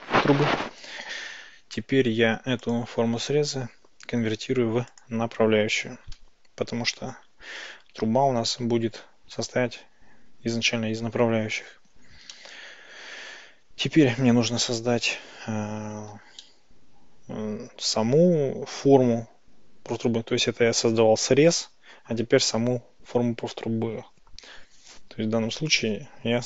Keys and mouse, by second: 2.7-5.1 drag, 12.4-13.1 shift+middle drag, 14.1 shift+a, 16.5-17.9 shift+middle drag, 25.9 Tab.